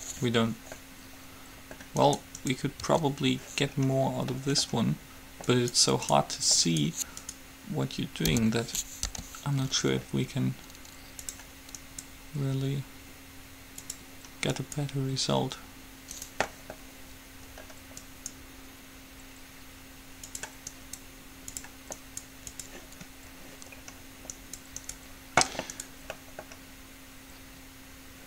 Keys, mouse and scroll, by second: 0.4-1.8 middle drag, 2.2-3.9 right drag, 3.0 Tab, 3.9 middle click, 5.7-8.7 right drag, 8.6 o, 9.2 g, 12.1-14.0 right drag, 14.7-16.6 right drag, 16.4-18.3 middle drag, 18.2-20.2 right drag, 18.4-19.8 middle drag, 20.9 middle click, 20.9-23.9 right drag, 23.2-26.7 middle drag, 24.5-27.6 right drag.